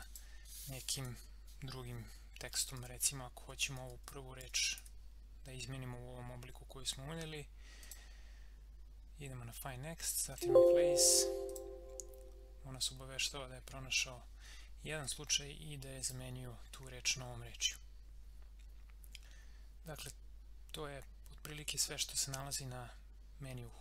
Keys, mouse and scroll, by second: 2.6-4.8 typing, 7.8 click, 10.3 click, 15.0 click.